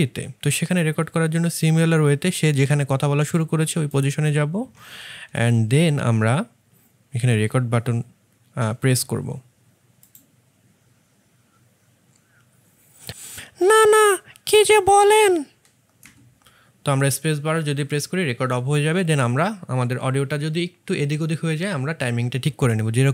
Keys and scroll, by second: 0.0 1, 15.9 space.